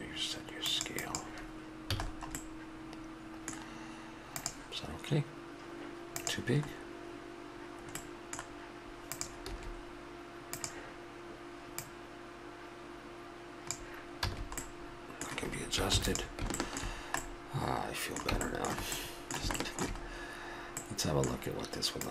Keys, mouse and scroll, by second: 0.7-2.3 drag, 2.0 a, 2.3 middle drag, 8.0-9.2 middle drag, 9.5 s, 9.8-10.8 drag, 11.8 click, 13.4 click, 14.2 a, 14.7-15.9 middle drag, 15.9 ctrl+s, 16.6-17.4 middle drag, 22.0 middle click.